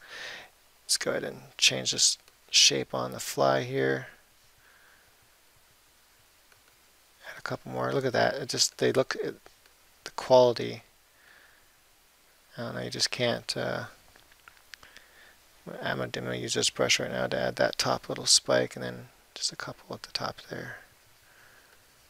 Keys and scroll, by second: 0.7 [, 8.5 [, 11.1 [, 18.6 [.